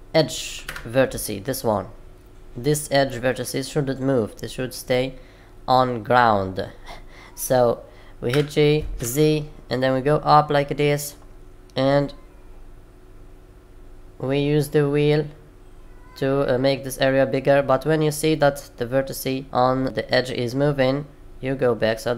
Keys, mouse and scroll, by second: 8.2 g.